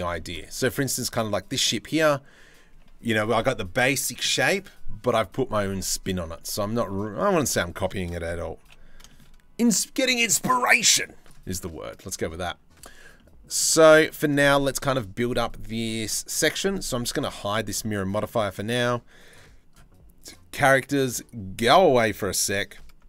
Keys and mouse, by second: 0.1-0.4 shift+middle drag, 5.9 drag, 6.6 click, 7.1 click, 7.5 shift+middle drag, 7.9 drag, 8.3 h, 12.8 drag, 13.5 shift+middle drag, 17.0 click, 17.4 click, 20.8 click, 21.8 middle drag, 22.7 shift+middle drag.